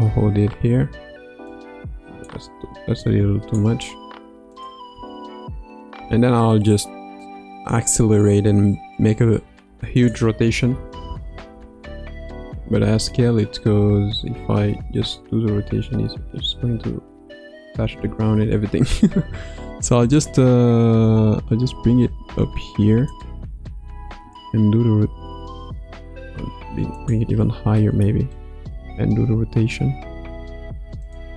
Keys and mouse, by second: 0.2 space, 1.5 click, 1.8 click, 3.0 click, 4.6-4.9 drag, 4.9 space, 5.9 space, 9.9 click, 12.7 s, 14.9 r, 21.6 g, 24.2 r, 26.3 g, 27.9 shift+middle click, 29.2 r.